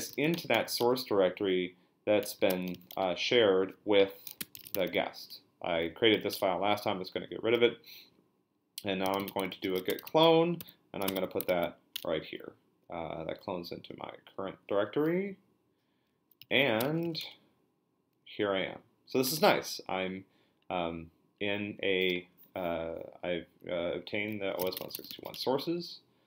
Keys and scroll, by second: 0.0-5.3 typing, 6.3 Return, 8.8-11.2 typing, 11.5 ctrl+l, 11.9 Return, 16.2-17.5 typing, 24.4-25.7 typing.